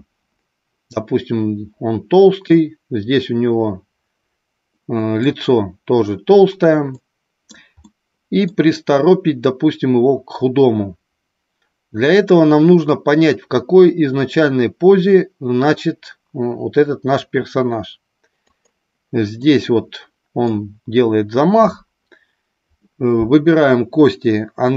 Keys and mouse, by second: 2.6-5.2 middle drag, 6.9-7.4 middle drag, 7.8-8.3 middle drag, 18.4 click, 19.4-20.4 middle drag.